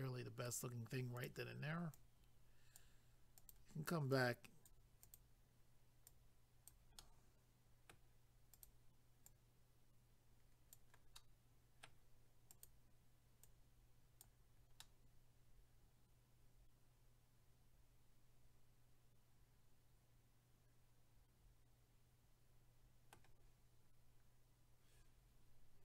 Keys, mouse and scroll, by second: 1.1 click, 1.9 click, 3.4 click, 5.0 click, 6.1 click, 7.0 middle click, 8.5 click, 9.3 click, 11.2 middle click, 12.5 click, 13.5 click, 14.8 middle click.